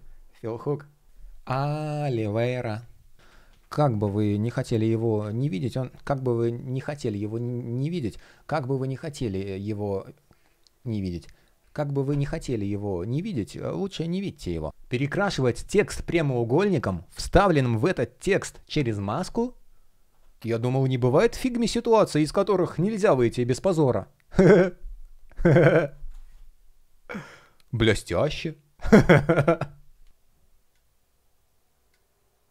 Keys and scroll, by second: 3.1 super+z.